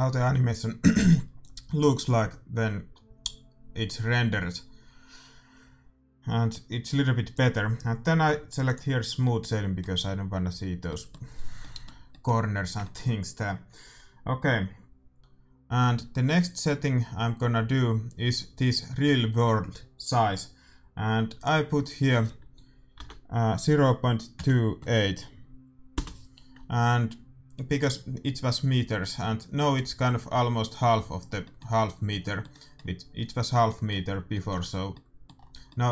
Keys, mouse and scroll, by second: 1.4-3.2 drag, 8.6-10.2 drag, 9.1-15.5 middle drag, 21.3-23.1 drag, 31.1-35.9 middle drag.